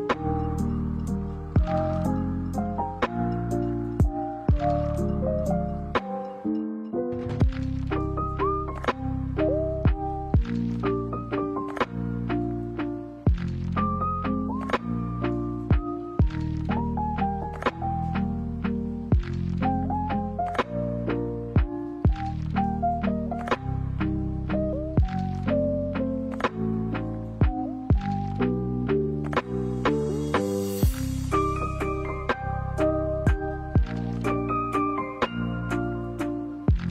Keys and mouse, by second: 1.0 middle click, 1.7 middle click, 2.8 ctrl+e, 3.9 ctrl+r, 6.3 middle click, 7.8 g, 11.4 middle click, 12.5 shift+middle click, 13.8 click, 14.6 alt+right click, 16.0 shift+d, 21.5 click, 23.1-26.9 drag, 27.5 right click, 28.8 click, 29.5 alt+right click, 32.4 alt+right click, 33.6 s, 35.3 middle click, 36.6 shift+middle click.